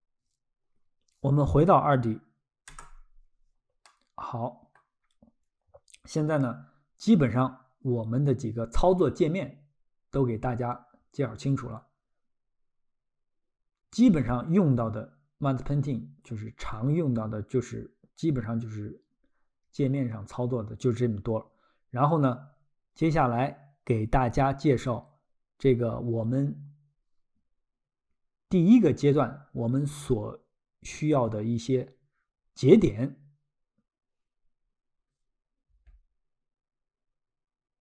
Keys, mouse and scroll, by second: 2.7 Tab, 3.8 middle click, 6.0 scroll.